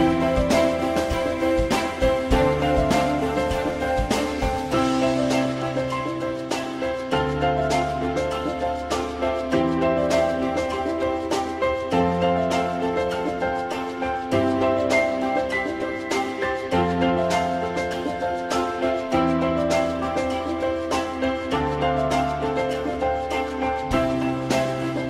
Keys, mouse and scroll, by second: 2.8 e, 3.5 alt+middle click, 7.3 alt+middle click, 8.3 ctrl+z, 9.2 ctrl+BackSpace, 11.3 2, 12.0 shift+click, 13.5 ctrl+shift+e, 14.2 alt+middle click, 18.2 w, 20.4 alt+middle click.